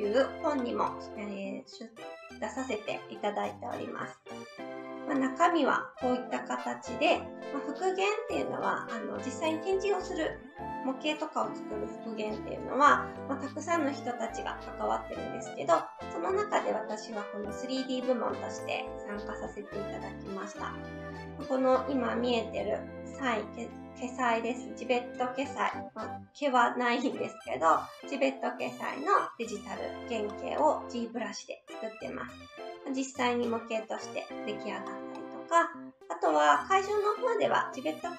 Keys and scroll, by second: 4.5 Right, 34.9 Right.